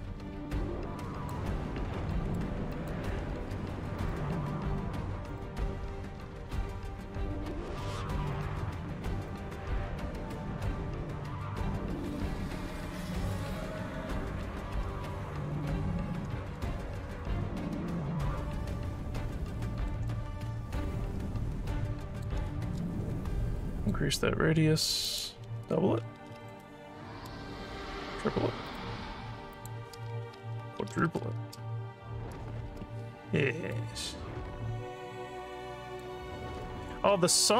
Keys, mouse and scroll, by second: 2.1 alt+middle click, 2.7 alt+click, 4.0 click, 5.3 click, 8.3 click, 9.3-14.4 drag, 15.1-16.1 alt+drag, 17.2 click, 18.5 click, 19.6 alt+middle click, 20.0-22.2 alt+drag, 23.7 click, 25.0 click, 26.4 2, 28.6 click, 29.5 click, 30.9 4, 33.4 scroll up 2, 33.7-36.0 alt+drag, 36.3 scroll down 2, 36.6 alt+middle click.